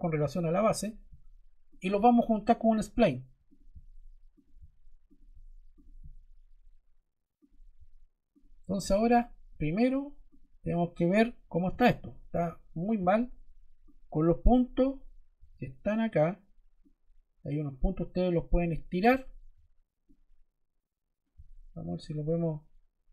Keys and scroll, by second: 15.3 Escape.